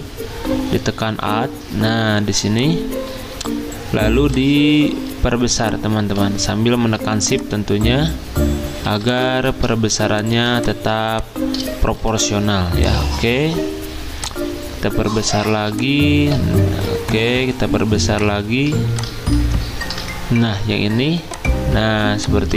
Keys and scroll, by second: 10.3 z, 11.9 v.